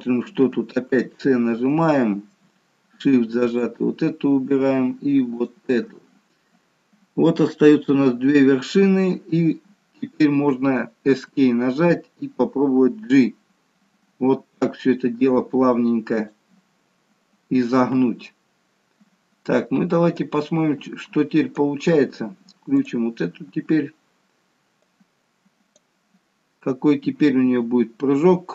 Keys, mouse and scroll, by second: 0.9 c, 20.3 click, 22.9 click.